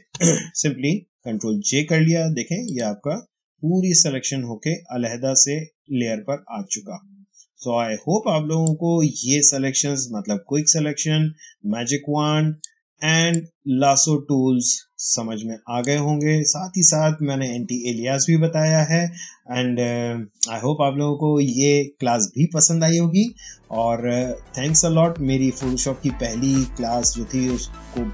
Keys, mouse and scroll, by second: 2.6 click, 8.5-16.8 drag.